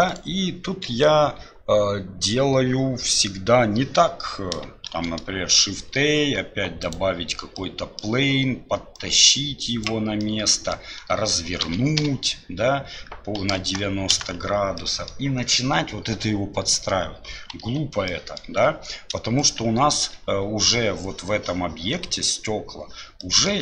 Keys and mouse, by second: 4.9 shift+a, 7.6-8.1 middle drag, 8.9-10.2 drag, 10.2-10.8 middle drag, 14.8-15.1 middle drag, 17.6 Delete, 18.1 click, 23.2 click.